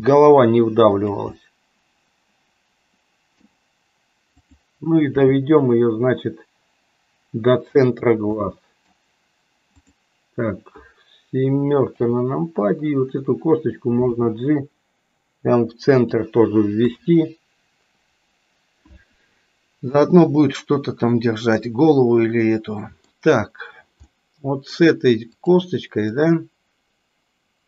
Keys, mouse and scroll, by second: 1.4-3.5 middle drag, 5.2 g, 8.4 middle click, 9.7 click, 11.8 KP_7, 14.1 g, 16.8 KP_3, 21.0-23.0 middle drag, 24.0 middle click, 25.4 click, 26.2-27.6 middle drag.